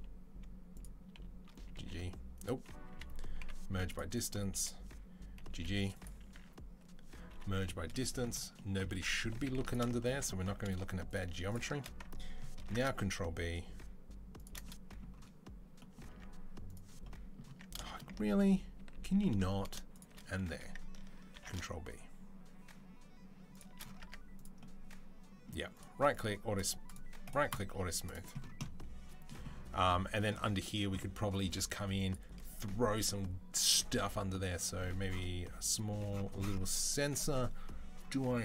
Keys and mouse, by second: 0.6 click, 1.4 g, 2.7 a, 3.2 m, 4.0 click, 5.2 g, 6.2 a, 7.1 m, 9.0 2, 9.4 alt+click, 9.4-16.5 alt+shift+middle drag, 12.4 ctrl+b, 15.9 Tab, 16.5 click, 16.6-18.7 middle drag, 17.3 Tab, 18.2 ctrl+z, 18.7 ctrl+z, 19.0 ctrl+z, 19.8 shift+click, 21.2 ctrl+b, 23.6-26.8 middle drag, 23.8 Tab, 26.4-26.8 drag, 26.4-38.4 right drag, 27.9 click, 27.9 middle click, 31.8 click, 31.8 middle click, 32.2-33.6 drag, 32.2-33.6 middle drag.